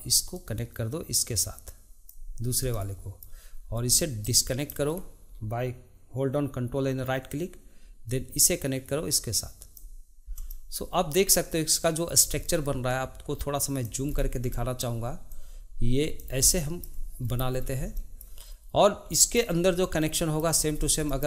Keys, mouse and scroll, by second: 0.3 drag, 2.7-4.2 shift+middle drag, 4.2 ctrl+right click, 8.1-10.5 drag, 10.5 shift+middle click, 11.4 click, 12.9 click, 14.1-14.5 scroll up 1, 14.5 shift+middle click, 15.3 click, 16.5-17.3 shift+middle drag, 17.3-18.0 scroll up 5, 18.0-20.8 shift+middle drag, 20.8 scroll up 2, 21.0-21.2 shift+middle drag.